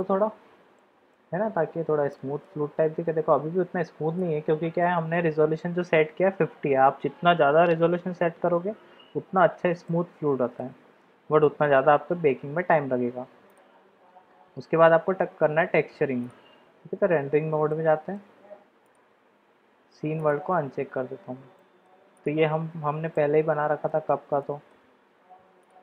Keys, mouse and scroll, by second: 0.8-1.1 middle drag, 2.1-2.4 shift+middle drag, 4.2-4.8 shift+middle drag, 9.8-10.5 middle drag, 11.4-11.8 shift+middle drag, 13.6-16.9 drag, 17.7-18.1 shift+middle drag, 18.8-20.6 drag, 21.6 shift+middle drag, 22.2 middle click, 23.1 middle drag, 23.4 click, 23.6 middle click, 24.4-24.7 shift+drag, 25.6 click.